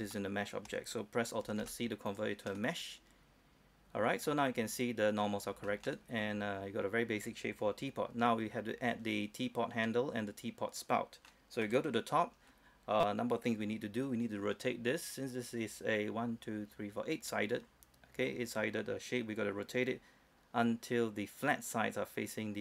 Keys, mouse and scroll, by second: 0.3 shift+middle click, 2.3 click, 2.7 middle click, 3.5-3.8 scroll up 1, 4.1-4.8 scroll down 1, 4.8 scroll down 1, 5.1-5.4 scroll up 1, 5.4-5.8 scroll down 1, 5.8-11.8 middle drag, 11.8 KP_7, 13.0-13.6 scroll up 1, 13.6 scroll down 1, 14.0-22.6 scroll up 1.